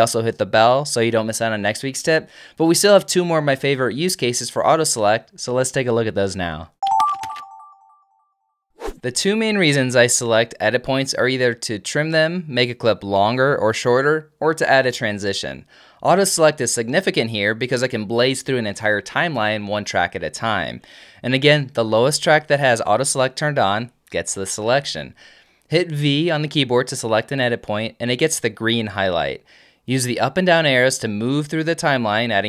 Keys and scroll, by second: 12.6 super+l, 13.1 super+k, 13.4 super+j, 13.8 super+k, 14.8 super+t, 15.5 super+Down, 17.0 super+Down, 17.1 super+l, 17.7 super+k, 18.1 super+j, 18.6 super+k, 26.6 v, 30.7 Down.